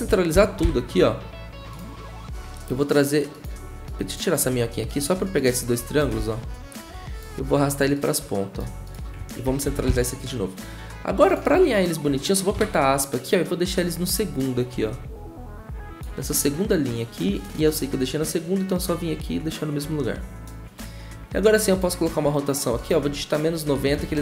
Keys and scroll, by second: 0.3 ctrl+alt+Home, 6.2 ctrl+z, 9.6 ctrl+alt+Home, 12.5 `, 16.5 `, 22.0 r, 23.3-24.2 typing.